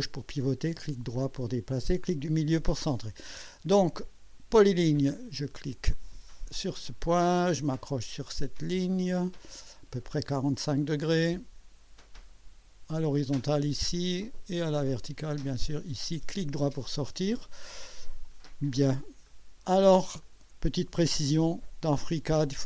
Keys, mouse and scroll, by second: 6.5 click, 8.9 click, 10.8 click, 13.3 click, 15.4 click, 16.9 right click, 18.3 right click, 19.3 right click, 20.2 click, 21.2 right click, 21.9 click.